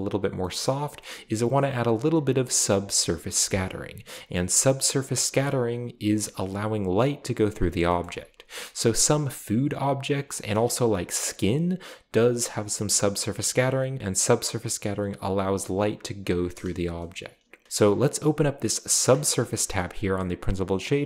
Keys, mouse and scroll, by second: 0.7 middle click, 0.8-1.5 scroll up 3, 8.0-8.6 scroll up 2, 9.6-10.2 scroll up 2, 19.1 drag, 19.4-20.1 scroll up 3, 19.4-19.8 middle drag, 20.5 click.